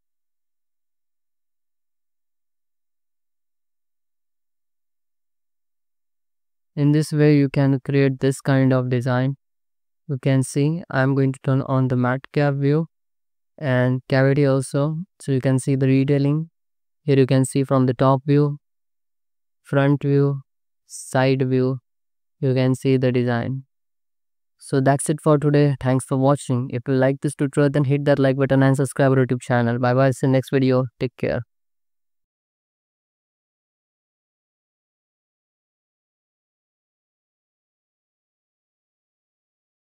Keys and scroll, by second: 0.3 Escape, 1.6 ctrl+z, 2.1 ctrl+x, 2.4 Tab, 2.8 alt+shift+z, 3.8 Tab, 4.0 a, 4.3 alt+shift+z, 5.0 Tab, 5.3 alt+shift+z, 5.6 ctrl+s, 24.5 ctrl+s, 25.8 alt+shift+z, 29.5 alt+shift+z.